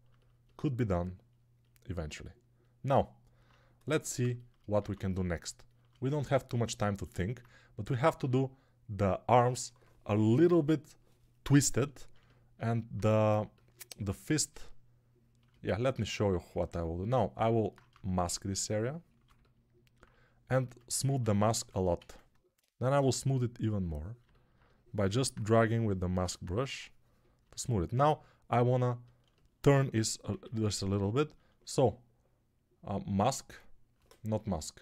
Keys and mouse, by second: 4.8 alt+q, 15.6 alt+q, 19.9-24.1 alt+drag, 19.9-24.1 alt+middle drag, 19.9-24.1 alt+right drag, 20.5-22.9 typing, 27.3-34.8 alt+drag, 27.3-34.8 alt+middle drag, 27.3-34.8 alt+right drag, 30.2 a.